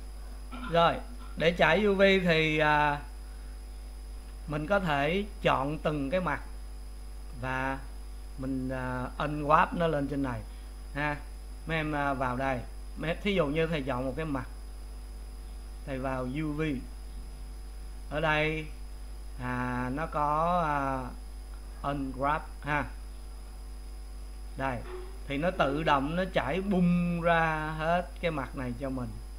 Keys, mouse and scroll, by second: 0.3 click, 1.2 click, 5.5 click, 14.1 click, 23.9 click.